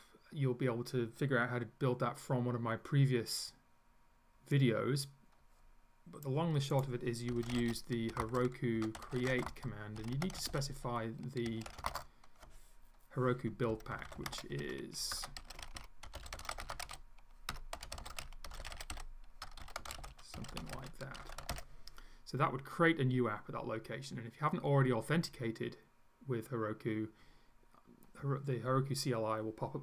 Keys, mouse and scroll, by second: 6.8 click, 7.1-12.3 typing, 13.5-22.0 typing.